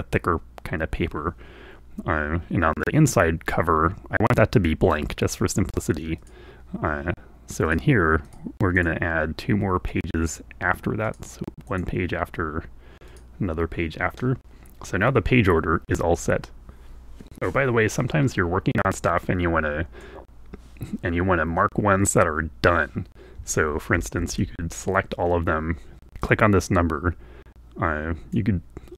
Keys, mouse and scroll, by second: 6.3 click, 7.8 click, 8.3 click, 8.8 click, 11.1 click, 11.8 click, 13.1 click, 19.0-24.7 drag, 24.0 a, 24.3 a, 26.1-28.6 drag.